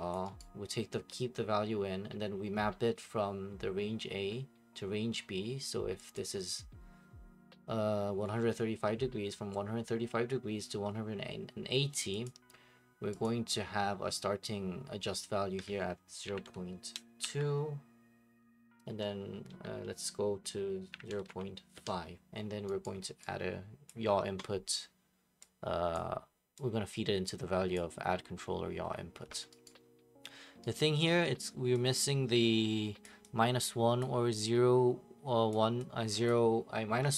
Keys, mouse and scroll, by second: 0.1 click, 0.4 right click, 6.1 click, 12.2 click, 13.2 click, 16.0-17.2 typing, 18.9 Tab, 20.6-21.7 typing, 22.8 right click, 23.9 click, 25.9 click, 27.7 click, 29.6 right click, 30.7 right click, 33.0 click, 34.0 click, 35.5 click, 36.3 click.